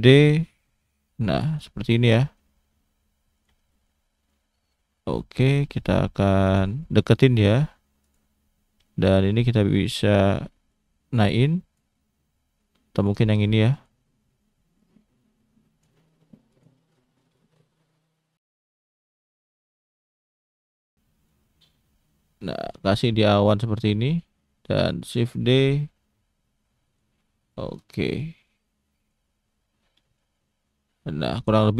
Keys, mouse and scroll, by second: 1.7 scroll down 1, 1.8 middle click, 2.5-3.2 scroll up 2, 3.3 shift+click, 3.7 shift+middle click, 4.3 click, 6.8 shift+middle click, 7.5 click, 8.0 click, 8.6 scroll down 1, 8.8 shift+middle click, 10.7 click, 11.9 middle click, 13.2 click, 13.7 click, 14.2 middle click, 14.8 click, 16.5 click, 16.9-17.3 scroll up 1, 17.3 shift+middle click, 18.5 g, 20.3 middle click, 21.3 click, 22.9 middle click, 23.5-24.1 scroll down 1, 24.1 click, 24.5 shift+middle click, 25.5 shift+d, 27.2 middle click, 28.2 click, 29.3 scroll down 1, 29.4 middle click.